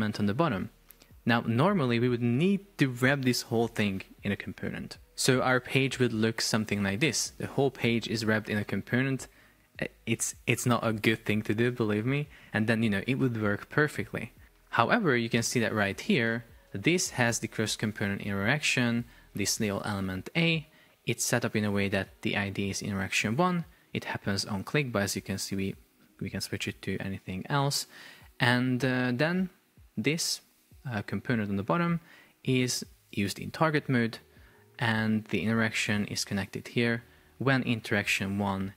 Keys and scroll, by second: 5.0 super+p, 19.6 shift+super+4, 20.4 Escape.